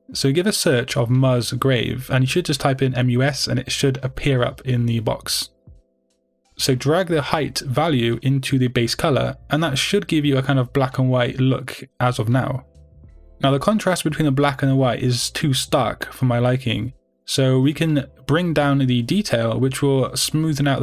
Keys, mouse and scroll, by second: 9.6-10.5 drag, 10.2-10.5 scroll up 2, 10.5-18.3 middle drag, 12.3-12.6 scroll down 2, 18.3-20.8 drag.